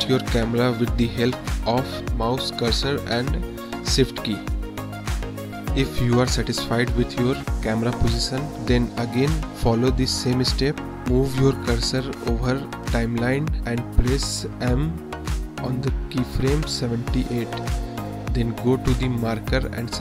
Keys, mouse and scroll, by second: 0.0 shift+drag, 0.1-0.7 shift+middle drag, 1.1 middle click, 1.8-2.2 shift+middle drag, 2.3 drag, 2.7-3.3 shift+middle drag, 3.8 shift+middle click, 8.5 m, 9.2-10.0 drag, 11.1-12.0 drag, 12.4 space, 14.5 space, 15.4 click, 16.3 space, 16.8 space, 17.9 click, 19.0-20.0 middle drag.